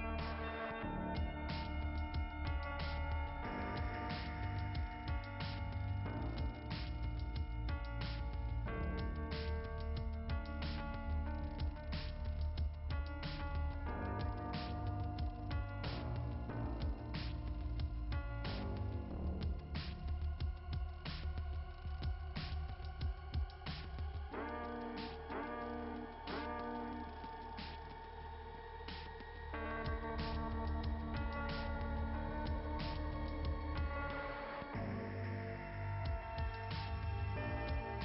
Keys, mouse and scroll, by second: 1.4 click, 4.5 click, 5.7 click, 5.9 click, 6.2 click, 8.4 scroll up 2, 8.6-9.0 scroll down 2, 9.5 scroll up 1, 9.5 scroll down 1, 9.6 scroll up 2, 9.9 scroll down 2, 10.0 scroll up 2, 15.4 click, 15.7 click, 16.5 click, 16.8 click, 19.9 click, 20.2 click, 20.8 click, 21.2 click, 24.4 click, 27.7 click, 28.3 click, 28.5 click, 31.3 click.